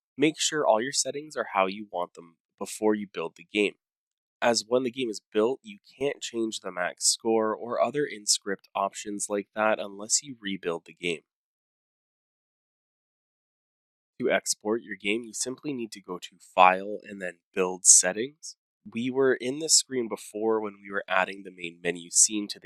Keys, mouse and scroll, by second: 6.6 click, 7.2 click, 9.2-10.6 scroll, 10.7 click, 11.1 click, 11.1-11.8 scroll down 10, 11.9 click, 11.9 scroll, 12.0 5, 12.6 click, 12.8 click, 13.4 click, 13.8 click, 13.9 click, 16.1 click, 17.2 click.